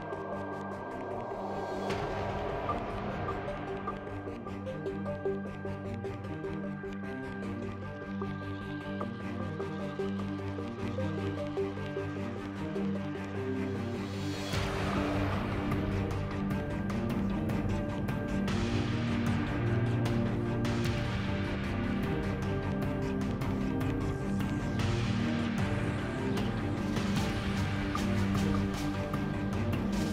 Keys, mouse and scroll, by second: 1.8 z, 2.8 shift+c, 3.2 x, 3.8 shift+a, 5.2 Tab, 6.3 ctrl+Tab, 7.3 z, 7.6 z, 7.7 x, 10.1 s, 11.1 ctrl+r, 14.7 g, 15.9 ctrl+b, 18.2 Tab, 18.5 z, 19.5 KP_7, 19.7 z, 20.5 shift+a, 25.3 Tab, 25.5 space, 28.4 x, 29.5 Tab.